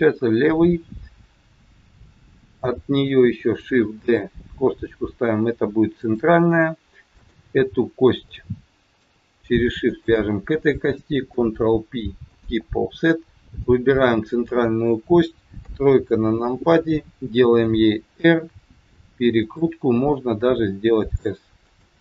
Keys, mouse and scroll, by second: 3.9 shift+d, 7.0 click, 7.8 scroll up 4, 8.1 shift+middle click, 9.9 shift+click, 11.3 ctrl+p, 13.5 click, 15.7 KP_3, 16.2 scroll down 4, 17.5 r, 20.4 s.